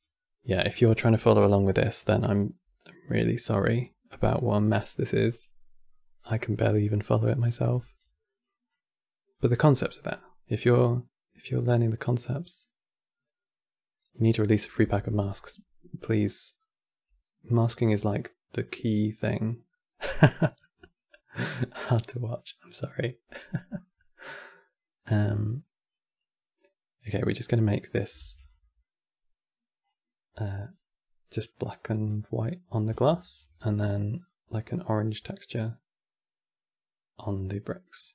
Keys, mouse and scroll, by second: 4.4-4.7 scroll down 5, 4.7 middle click, 5.7 scroll up 2, 6.1 middle click, 6.4 scroll up 4, 6.9-8.4 middle drag, 8.4 click, 15.7 click, 17.4 click, 21.0 click, 22.0 middle click, 22.7 click, 23.6-27.1 middle drag, 27.1-27.7 scroll up 1, 27.7 click, 27.9 shift+d, 28.3-29.5 middle drag, 29.5 click, 31.1 click, 32.2 click, 33.9 click.